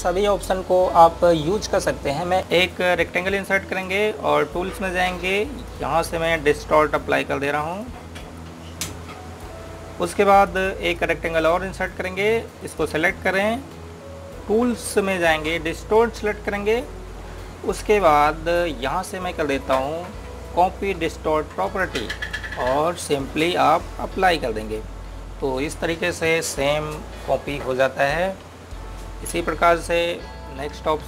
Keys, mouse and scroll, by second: 3.2 click, 16.8 click, 22.7 click, 25.4 click.